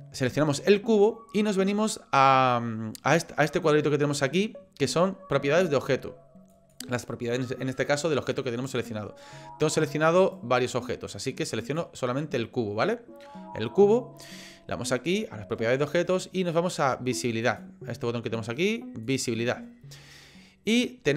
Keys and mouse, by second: 6.5 click, 10.2 click, 17.4 click, 19.1 click.